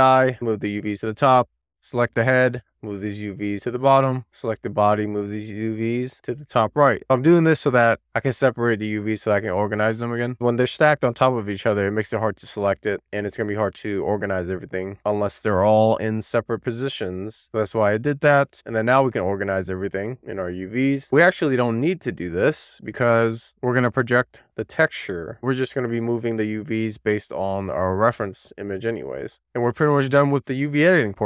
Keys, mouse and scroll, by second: 0.3 click, 1.6 click, 1.8 Tab, 2.6 click, 3.3 a, 3.6 click, 4.3 Tab, 4.9 click, 5.5-6.4 scroll down 2, 6.4 click, 6.9 click, 7.1 Tab, 9.2 a, 10.8 Tab, 11.5 a, 13.2-14.1 scroll up 2, 14.1-14.7 scroll down 1, 14.9 shift+middle click, 18.4-19.1 drag, 19.8 click, 22.4 super+z, 27.4-27.8 scroll down 2, 27.8 shift+middle click, 28.4 middle click, 29.1-29.8 scroll down 3, 29.8-30.2 scroll down 1, 30.3 shift+middle click.